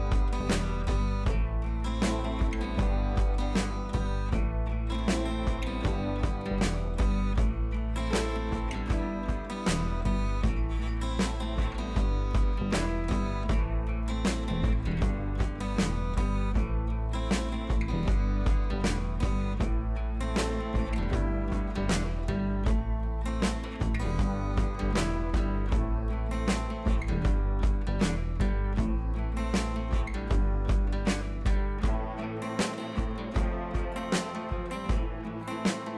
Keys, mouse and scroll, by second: 1.0 scroll down 1, 1.5 alt+scroll up 1, 2.0-2.4 alt+scroll down 2, 3.0-3.7 scroll up 2, 3.7-4.6 drag, 5.2 alt+scroll down 1, 5.4-11.8 drag, 15.1-15.7 scroll down 2, 16.8-17.2 shift+click, 17.5 alt+scroll up 1, 18.6 scroll up 1, 19.2-19.9 click, 20.0 alt+scroll up 1, 20.7 alt+scroll down 1, 21.2-21.6 scroll up 1, 21.6 shift+click, 23.6-24.8 shift+drag, 25.3 click, 26.4 right click, 26.6 click, 27.3 ctrl+[, 27.8 click, 28.2 right click, 28.7 click, 30.1 Up, 30.5 click, 30.6 Up, 32.6 Right, 34.4 click.